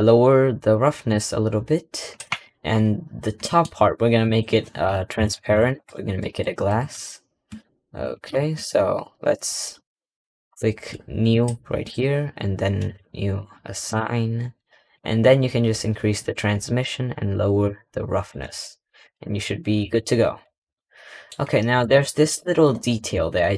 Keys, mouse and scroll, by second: 1.0-2.1 drag, 2.1 Tab, 2.7-3.3 scroll down 2, 3.3 middle click, 3.6 3, 4.1 click, 5.0 ctrl+KP_Add, 5.2 ctrl+KP_Add, 5.4 ctrl+KP_Add, 5.6 ctrl+KP_Add, 5.7 ctrl+KP_Add, 6.1 ctrl+KP_Add, 6.6 ctrl+KP_Add, 8.1 ctrl+KP_Subtract, 9.3-11.2 scroll up 8, 11.2-14.5 drag, 14.5-16.1 scroll down 10, 16.1-19.0 drag, 19.3-19.7 scroll down 4, 19.7 Tab, 20.0-20.6 scroll down 3, 20.1 middle click, 20.6-21.3 middle drag, 21.3 scroll up 3, 21.8-22.2 shift+middle drag, 22.2-22.8 scroll up 4, 22.8 Tab.